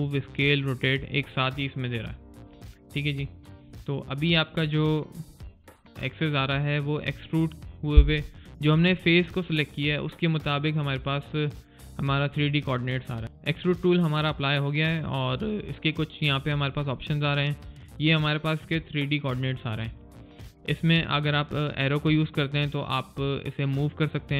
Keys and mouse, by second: 2.6 click, 2.9 alt+right click, 3.2 alt+middle click, 3.5 alt+click, 4.5 alt+right click, 4.9 alt+click.